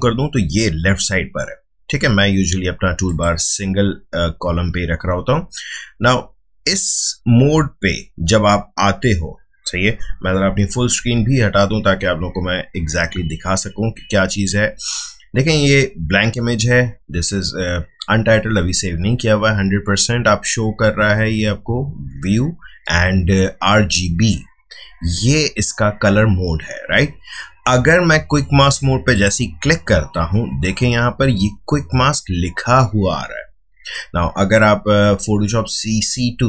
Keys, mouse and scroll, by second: 3.0 click, 10.4 f, 10.9 f, 29.1 click.